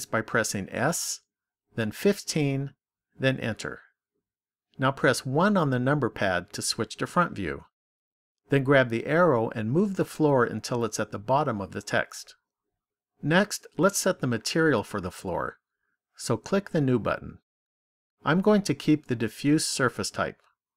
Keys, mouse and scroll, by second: 0.7 s, 5.2 KP_1, 9.1 click, 16.9 click.